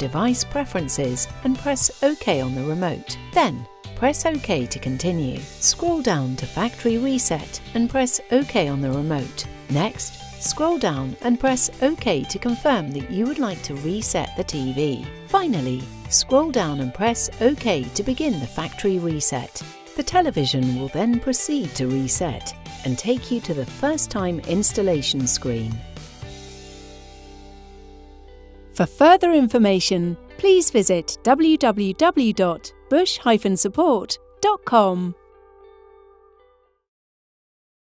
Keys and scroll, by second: 2.0 Return, 4.0 Return, 5.8 Down, 7.5 Return, 10.4 Down, 11.9 Return, 15.3 Down, 16.8 Return.